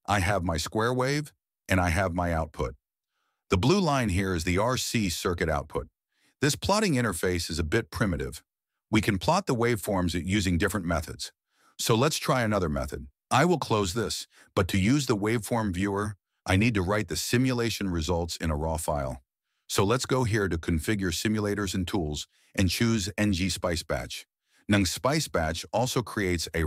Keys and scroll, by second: 0.1 Return.